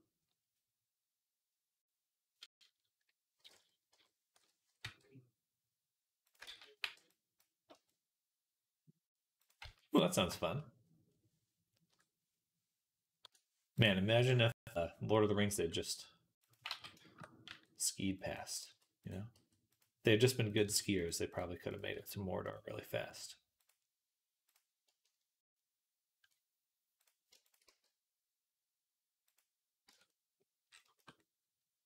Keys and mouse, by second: 4.7 r, 6.3 ctrl+z, 6.7 b, 7.6 r, 9.4 z, 10.1 shift+middle click, 10.6-15.4 drag, 14.4 KP_3, 15.4 g, 16.5 ctrl+z, 17.3 g, 18.4 ctrl+z, 19.2 g, 20.5 g, 21.8 g, 27.5 g, 29.7 Tab, 30.0 right click, 31.0 right click, 31.6-31.8 drag.